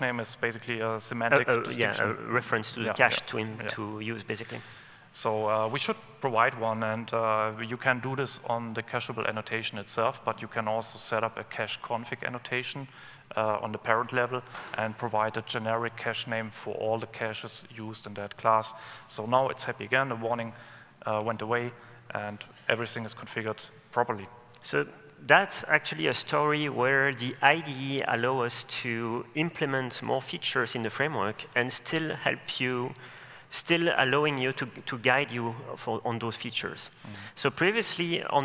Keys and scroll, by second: 11.5 super+/, 12.1 super+/, 32.2 super+/, 33.7 super+/.